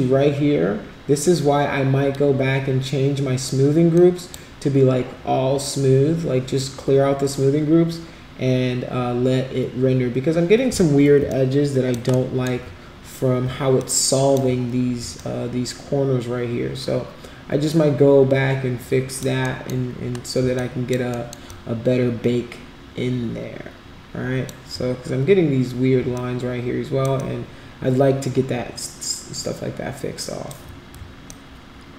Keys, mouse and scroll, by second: 3.9-4.3 drag, 11.2 alt+click, 12.2 alt+middle click, 13.8 alt+click, 15.1-19.2 alt+drag, 19.4 alt+middle click, 20.5 alt+click, 21.1 alt+middle click, 21.5-24.4 alt+drag, 26.1 alt+click, 27.1-30.5 alt+drag, 31.3 alt+click.